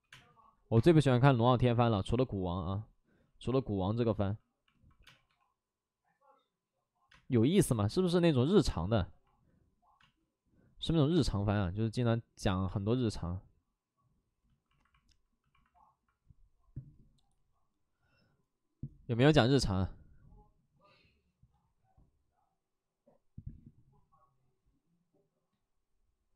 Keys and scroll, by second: 0.0 space, 0.7 space, 1.5 ctrl+z, 4.9 3, 5.2 space, 5.2 3, 7.0 space, 7.6 space, 11.0 space, 11.1 space.